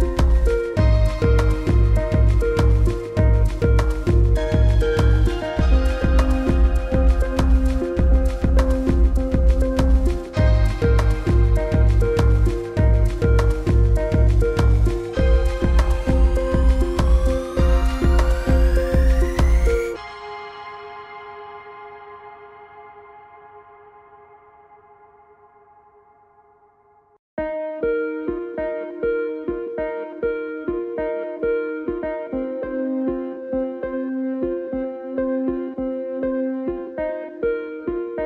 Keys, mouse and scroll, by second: 22.8 e, 23.8 click, 26.0-27.0 scroll down 1, 27.0 click, 28.6 click, 29.8 click, 30.0 alt+scroll up 1, 30.1 click, 32.1 click.